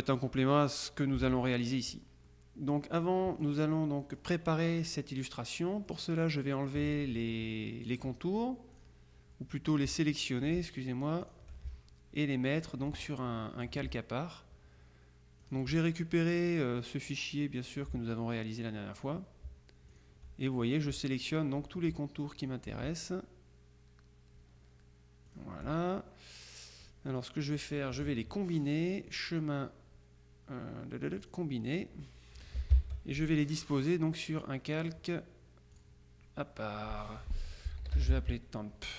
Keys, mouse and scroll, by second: 1.4 alt+Tab, 2.4 middle click, 3.9 middle click, 5.1 middle click, 6.4 middle click, 8.0 click, 8.8 click, 10.2 shift+click, 11.3 ctrl+click, 12.7 click, 13.3 click, 15.5 shift+click, 17.4 click, 19.1 shift+click, 20.0 click, 21.4 shift+click, 22.5 click, 25.4 click, 26.9 click, 29.2 click, 31.3 click, 32.8 ctrl+shift+l, 34.5-35.5 drag, 35.8 click, 37.6-38.7 typing.